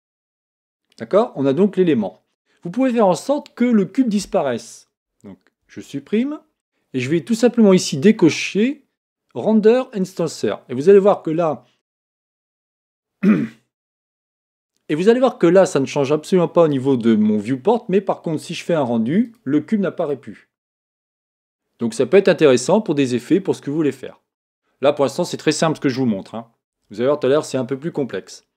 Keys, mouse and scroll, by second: 10.1 click, 19.2-22.3 drag.